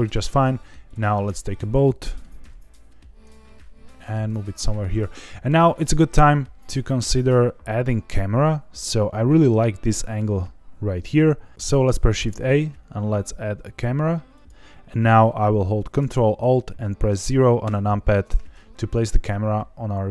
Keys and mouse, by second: 0.8 click, 1.9 middle drag, 2.4 g, 3.9 click, 4.3-4.8 middle drag, 5.1 middle click, 6.1-10.1 middle drag, 10.5-11.5 middle drag, 12.0 shift+a, 17.6 ctrl+alt+KP_0.